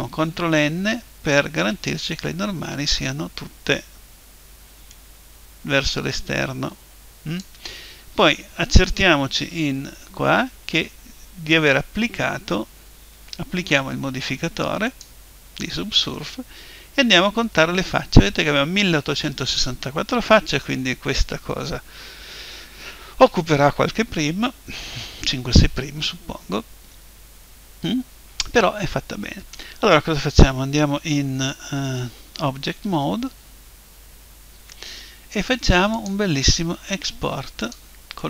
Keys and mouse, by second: 0.6 ctrl+n, 4.9 click, 9.4 Tab, 14.9 click, 16.4 Tab, 26.9-28.8 middle drag, 31.8 Tab, 36.0 click.